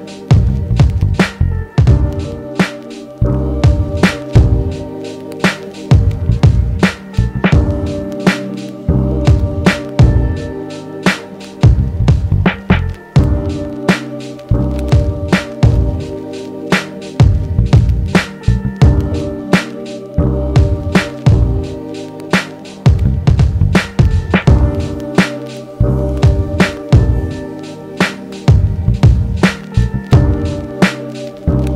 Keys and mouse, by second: 2.2 ctrl+z, 5.5 middle click, 6.0 Delete, 6.8 shift+a, 10.3 ctrl+Tab, 12.1 click, 13.8-31.7 drag.